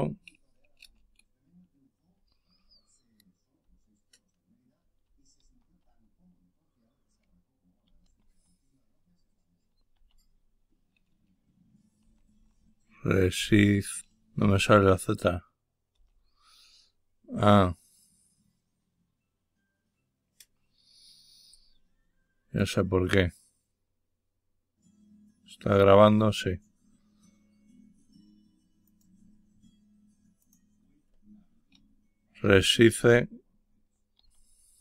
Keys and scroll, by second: 0.7 typing, 5.3 typing, 7.7-8.4 typing, 9.8 typing, 11.9-12.2 typing, 13.2-13.8 typing, 32.3-32.8 typing, 34.1 typing.